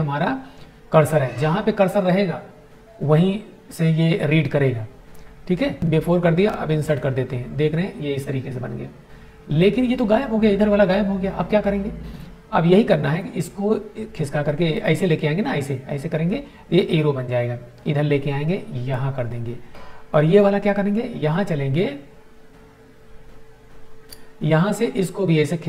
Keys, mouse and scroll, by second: 6.7 click, 12.4-14.8 drag, 16.9-18.9 drag, 24.0-25.6 drag.